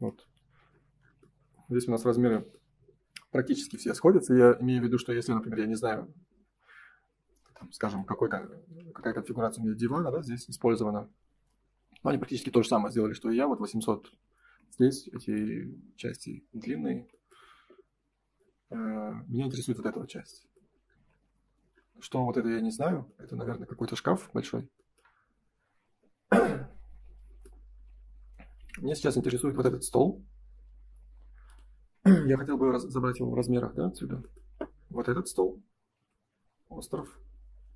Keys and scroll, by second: 14.6 Escape, 16.8 Escape, 21.4 space, 33.2 space.